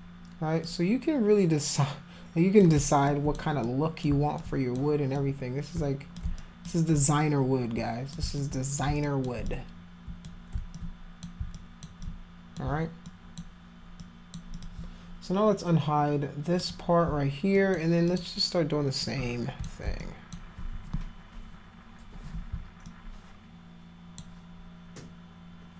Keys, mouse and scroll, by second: 0.7-2.6 drag, 3.1 alt+click, 3.7 click, 4.4 alt+click, 5.2-6.2 drag, 6.4 alt+click, 7.0-8.2 drag, 8.4 alt+click, 9.0 alt+click, 9.5 click, 10.7 alt+click, 11.5 alt+click, 12.0 click, 13.1 alt+click, 14.0 alt+click, 14.5 alt+click, 15.1 click, 16.6 click, 17.6 alt+click, 18.1 alt+click, 19.0 alt+click, 20.0 alt+click, 22.9-24.2 alt+drag.